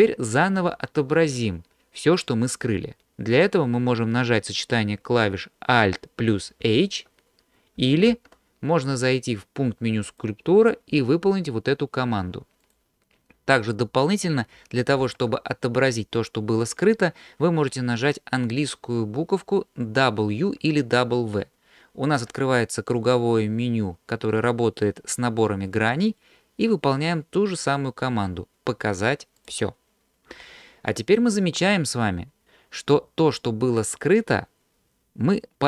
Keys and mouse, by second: 6.7 alt+h, 8.1 ctrl+z, 10.1-12.8 drag, 15.0 ctrl+z, 22.1 w.